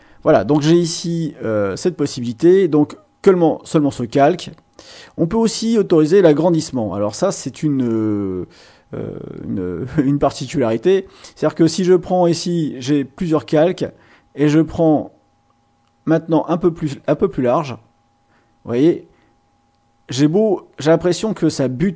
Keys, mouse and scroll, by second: 14.8-21.9 drag.